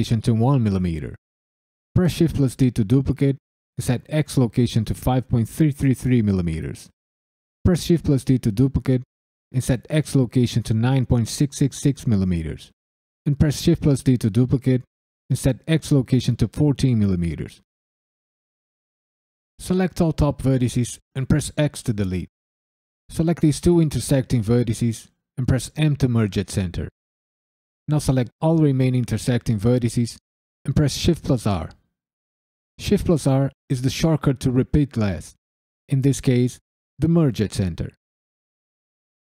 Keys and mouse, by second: 1.9 shift+d, 2.3 right click, 3.6-5.9 drag, 5.5 KP_3, 7.6 shift+d, 8.1 right click, 9.4-11.7 drag, 11.3 KP_6, 13.4 shift+d, 13.8-15.0 right drag, 15.1-16.5 drag, 17.8 drag, 21.5 x, 22.7 click, 25.7 m, 27.2 click, 28.2 shift+r, 28.8 click, 29.3 shift+r, 29.7 click, 30.2 shift+r, 30.8 click, 31.3-36.1 typing, 31.7 click, 32.6 click, 33.6 click, 34.5 click, 35.5 click, 37.0 click, 37.4 shift+click, 37.8 shift+click, 38.5 shift+click.